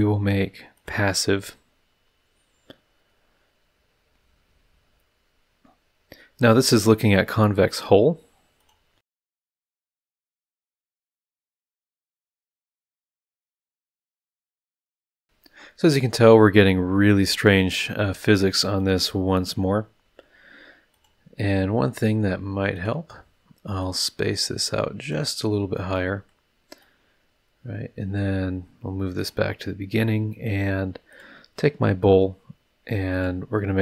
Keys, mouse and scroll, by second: 0.7 click, 8.6 click, 9.3 click, 9.4 click, 9.5 click, 10.1 click, 10.3 click, 10.5 click, 10.7 click, 11.1 click, 11.4 click, 11.4 click, 12.0 click, 12.1 click, 12.9 click, 13.4 drag, 14.1 middle drag, 17.2 click, 18.7 click, 20.9 click, 22.7 click, 23.7-25.3 drag, 25.7-26.5 drag, 26.8 click, 27.2-27.7 middle drag, 27.7 click, 27.8 middle click, 29.1 middle click, 31.1 click, 33.1 click.